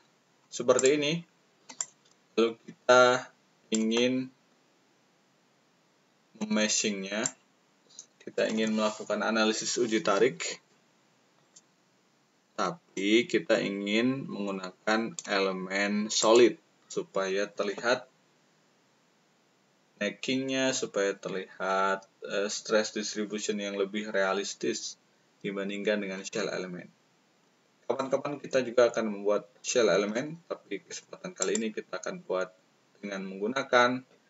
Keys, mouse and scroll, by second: 0.7 click, 1.7-3.7 ctrl+drag, 7.1-8.3 ctrl+drag, 11.3 click, 12.9-15.1 ctrl+drag, 16.1 click, 27.9-30.2 ctrl+drag, 31.3 click.